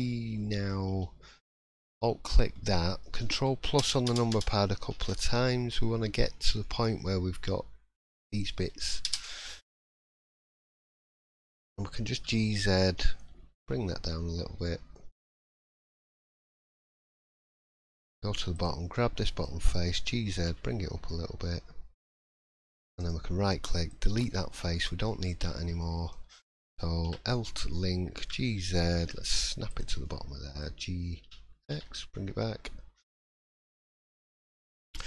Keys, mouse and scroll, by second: 0.1-0.4 scroll up 2, 0.4 middle click, 1.5 alt+click, 2.0 middle click, 2.4 scroll down 2, 2.8 middle click, 3.8 ctrl+KP_Add, 4.6 ctrl+KP_Add, 5.8 middle click, 6.2 scroll up 2, 6.6 shift+middle click, 9.0 ctrl+KP_Add, 9.6-10.0 scroll down 4, 10.0 middle click, 10.5 shift+middle click, 10.8-11.2 scroll up 2, 11.2 middle click, 11.6 scroll up 1, 12.1 g, 16.2 middle click, 16.8 shift+middle click, 17.1-17.7 shift+scroll up 2, 17.7 middle click, 18.5 click, 18.9 middle click, 19.9 g, 23.0 right click, 24.3 middle click, 24.9 scroll up 1, 25.0 middle click, 25.4-25.8 scroll down 4, 25.8 shift+middle click, 27.0 l, 28.2 g, 30.0 middle click, 31.2 g, 34.1 middle click, 34.5-35.0 scroll up 3, 34.9 click.